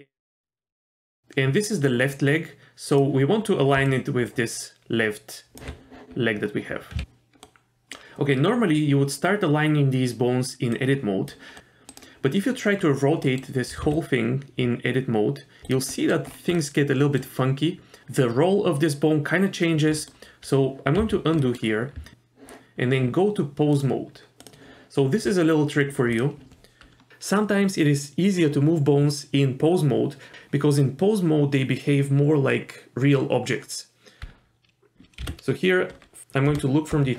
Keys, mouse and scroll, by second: 0.3 middle click, 0.7 KP_1, 1.1 g, 3.7 d, 3.9-5.6 drag, 5.6 d, 5.6 d, 7.4 middle click, 10.7 click, 11.6 r, 12.8 scroll up 1, 13.2 middle click, 13.7 r, 15.9 middle click, 16.3 scroll up 2, 16.6 middle click, 17.4-18.0 scroll up 2, 20.0 middle click, 21.0 ctrl+z, 21.4 middle click, 21.6 scroll down 1, 22.0 Tab, 22.1 click, 23.7-24.5 drag, 26.1 click, 35.2 KP_7, 35.2 KP_4, 36.5 KP_7.